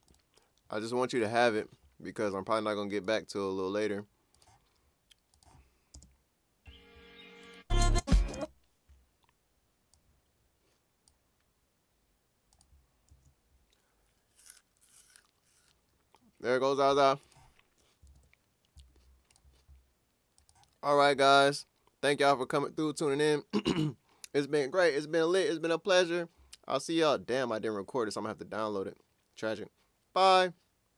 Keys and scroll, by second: 5.9 space, 8.3 space, 13.1 Return, 18.2 super+q.